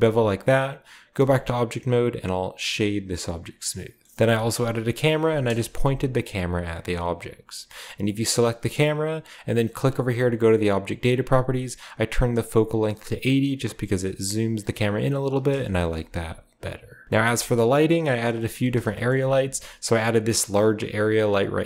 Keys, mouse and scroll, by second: 1.1 Tab, 1.6 w, 3.1-4.1 drag, 4.1 alt+h, 4.1 middle drag, 4.1-5.4 scroll down 1, 5.4 KP_0, 6.2-6.9 scroll down 1, 6.9-8.8 drag, 6.9 scroll down 1, 9.4 click, 10.2 click, 10.7-12.0 drag, 13.6-15.5 middle drag, 13.7-15.5 drag, 17.0 ctrl+alt+Left, 17.0-18.1 shift+drag, 17.0-19.0 shift+middle drag, 17.0-18.1 shift+scroll up 1, 18.1 scroll up 1, 18.2-21.6 shift+right drag, 18.7-20.4 shift+scroll down 1, 19.3 g.